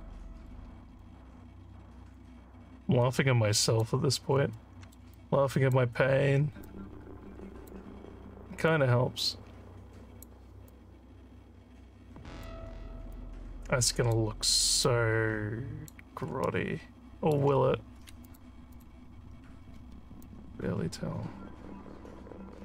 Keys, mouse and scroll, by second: 1.0-2.2 drag, 3.0 click, 4.5 alt+middle click, 5.1 alt+click, 6.6-7.7 drag, 8.7-10.2 drag, 10.7-12.4 alt+drag, 13.1 click, 14.8-15.9 drag, 16.5 alt+middle click, 18.2 click, 18.7 click, 19.9 alt+scroll up 2, 20.3-22.6 alt+drag.